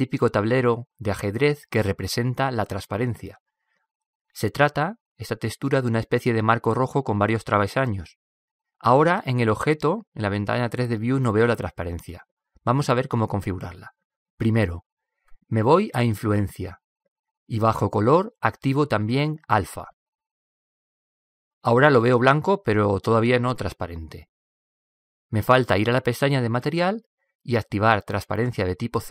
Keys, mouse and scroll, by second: 5.4 middle click, 8.3-10.9 middle drag, 17.0-18.7 drag, 20.4-22.2 drag, 27.6-29.1 drag.